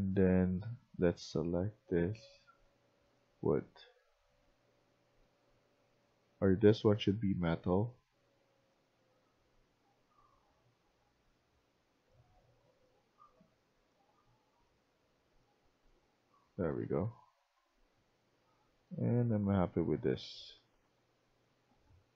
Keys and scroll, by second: 2.6-5.9 typing, 15.8-22.1 typing.